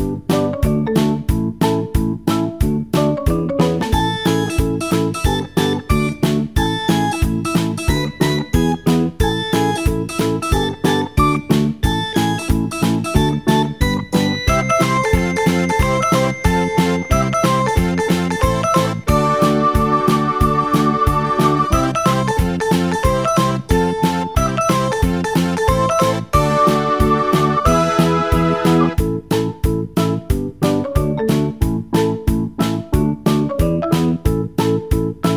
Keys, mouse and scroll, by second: 0.1 KP_3, 1.2-2.1 shift+middle drag, 2.1-3.3 scroll up 2, 3.3 scroll up 1, 3.4 click, 4.7 g, 10.5 click, 12.9 g, 15.2 g, 19.4-23.3 shift+middle drag, 23.3-26.2 drag, 32.9-35.3 drag.